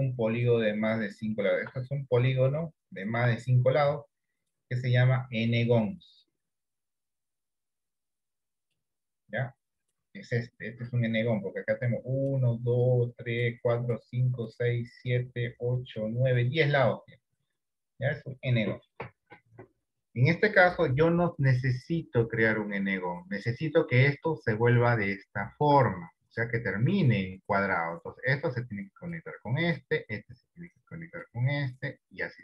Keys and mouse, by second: 0.5 middle click, 1.5 shift+middle click, 2.1 middle click, 2.9 shift+middle click, 5.1 click, 6.0 click, 6.6 click, 7.5 click, 8.1 click, 9.9 click, 10.6 click, 11.9 click, 12.7 click, 13.3 click, 13.7 click, 14.2 click, 14.7 click, 15.8 click, 16.4 click, 21.2 d, 23.8 d, 24.5 middle click, 25.3 shift+middle click, 28.2-29.2 drag, 30.2-31.3 drag, 32.3 click.